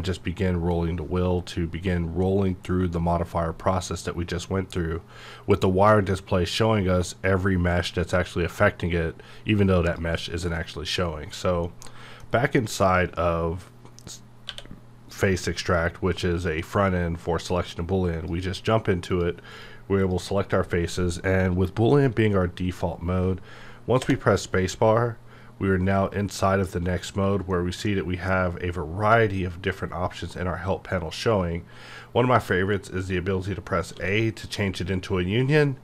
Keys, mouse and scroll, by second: 9.8 click, 10.6 middle click, 11.3 click, 11.6-16.7 middle drag, 18.0 click, 24.0 space, 27.5-30.6 middle drag, 33.9-35.8 middle drag.